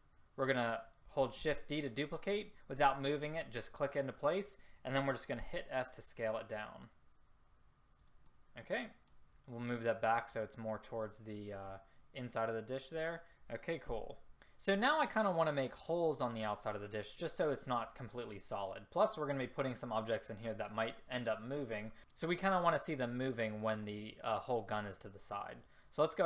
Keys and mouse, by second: 1.4 shift+d, 4.1-4.7 drag, 5.5 s, 14.1 a.